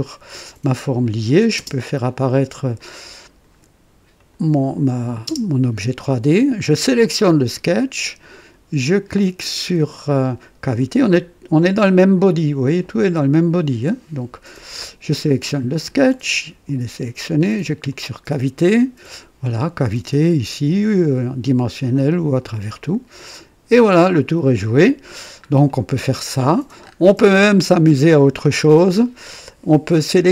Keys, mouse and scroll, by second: 1.0 click, 1.6 space, 2.7-3.6 drag, 4.2 click, 5.3 space, 6.8 click, 12.4 click, 13.5 click, 16.0 scroll down 1, 17.8 click, 19.1 click, 21.0 click, 21.8 click, 22.7-24.1 drag, 24.6 click, 25.1-25.7 scroll down 2, 25.7-26.6 drag, 26.8-27.1 scroll up 2, 27.3 right click, 28.0 scroll up 2, 28.5-29.2 right drag.